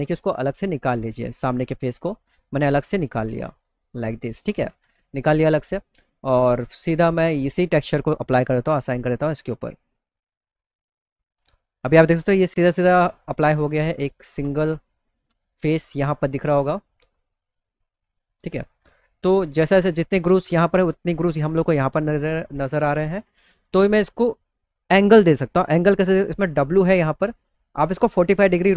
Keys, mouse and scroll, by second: 0.0 click, 0.6 click, 1.0 middle click, 1.5 middle click, 1.9 click, 2.3 alt+middle click, 3.3 click, 4.2 ctrl+z, 4.5 alt+middle click, 5.2 middle click, 5.4 middle click, 7.9 click, 8.8 click, 9.9 click, 10.6 middle click, 11.0 middle click, 12.0 alt+w, 13.0 alt+w, 13.8 alt+w, 14.3 middle click, 14.7 alt+w, 15.2 middle click, 15.3 middle click, 15.6 alt+middle click, 16.7 middle click, 18.0 middle click, 18.5 middle click, 19.2-19.6 scroll up 2, 20.8 middle click, 21.3 middle click, 23.3 click, 26.4 click.